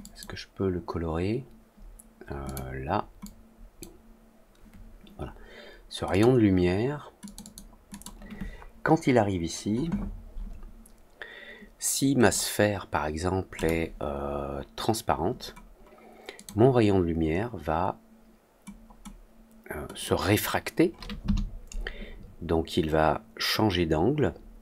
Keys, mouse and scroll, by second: 2.4 click, 3.1 click, 6.0 click, 7.2 click, 7.3 click, 7.8 click, 12.1 click, 13.5 click, 16.3 click, 19.9 click.